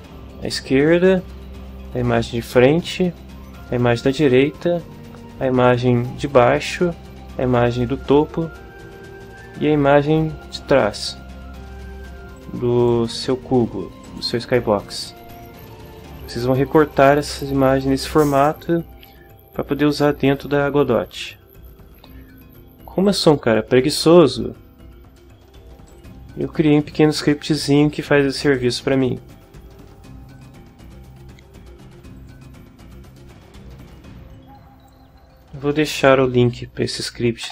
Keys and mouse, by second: 12.4 click, 14.0 click, 14.4-19.3 middle drag, 23.0 click, 23.3 middle click, 23.9 click, 24.2 middle click, 25.9 click, 28.5 click, 29.3 right click, 32.2 click, 34.3 click, 35.1-37.5 middle drag.